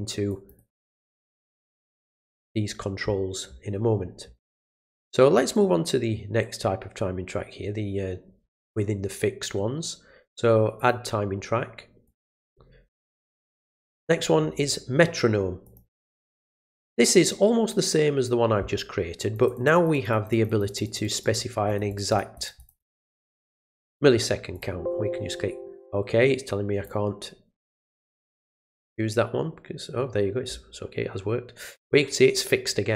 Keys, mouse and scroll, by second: 0.3 click, 0.5 click, 1.9 click, 5.4 right click, 10.8 click, 12.0 click, 13.4 middle click, 13.4-13.8 scroll up 1, 15.6 click, 16.5 click, 19.3 click, 19.5 click, 19.7 click, 19.9 click, 20.1 click, 20.3 click, 20.5 click, 20.7 click, 20.8 click, 21.0 click, 21.2 click, 21.7 click, 21.9 click, 22.1 click, 22.3 click, 22.6 click, 22.8 click, 23.0 click, 23.3 click, 23.7 click, 24.5 click, 26.8 click, 28.3 click, 31.7 click, 32.3-32.9 drag.